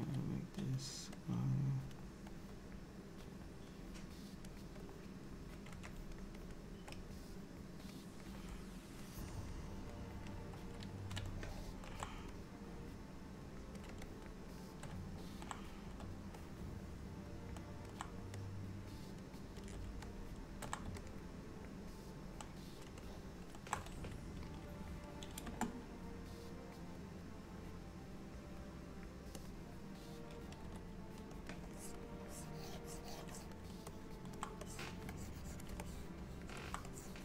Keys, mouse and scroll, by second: 0.1 f, 1.3 click, 2.4 click, 3.8 click, 4.9 click, 6.0 shift+click, 6.4 shift+click, 6.8 shift+click, 7.4 click, 8.3 click, 9.4 shift+click, 9.8 shift+click, 10.4 shift+click, 11.4 shift+middle click, 12.4 click, 14.1 shift+click, 14.6 shift+click, 16.5 middle click, 18.5 click, 20.2 shift+middle click, 21.1 middle click, 23.1 shift+middle click, 25.5 space, 30.7 f, 31.7 click, 32.3 click, 34.0 middle click, 34.7 click, 35.2 click, 35.2 click, 35.9 middle click, 37.0 click.